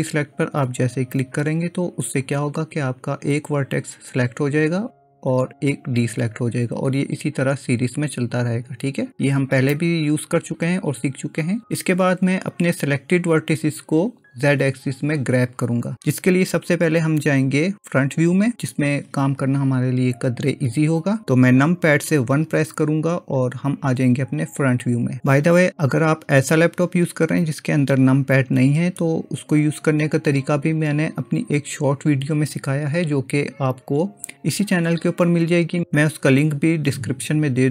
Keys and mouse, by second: 0.0-1.8 drag, 9.8-10.9 middle drag, 11.1 middle click, 22.5 KP_1.